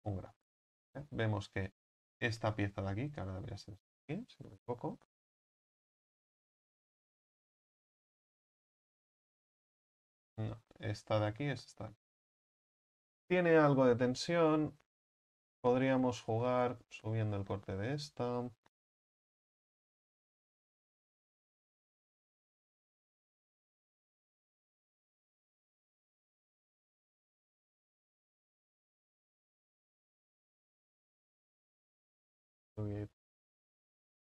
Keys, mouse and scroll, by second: 2.7-3.2 scroll up 5, 3.2 right click, 4.6 l, 11.4-12.4 scroll up 4, 14.4 scroll up 5, 15.3 right click, 15.9 right click, 16.6 alt+shift+right click, 16.8 alt+shift+right click, 17.2 scroll up 4, 17.9 alt+shift+right click, 20.1 ctrl+z, 22.9 u, 25.3 u, 25.7 right click, 26.3 right click, 26.8 alt+shift+right click, 29.0 u, 29.2-29.7 scroll down 4, 29.7-31.8 middle drag, 31.8 scroll down 2, 32.0 a, 32.2 a.